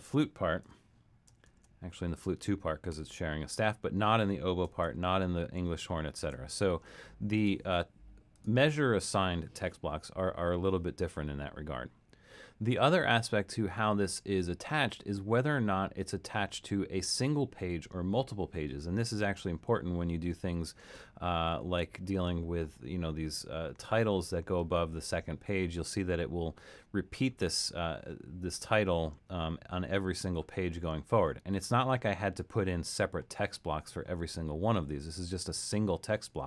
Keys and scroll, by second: 1.5 alt+super+., 2.9 alt+super+., 4.8 alt+super+., 5.6 alt+super+., 19.7 super+=, 20.6 super+-, 21.0 super+-, 21.5 super+-.